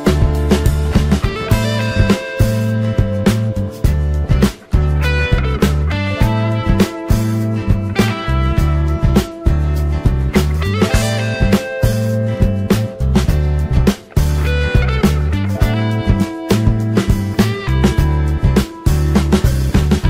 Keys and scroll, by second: 7.9 ctrl+z.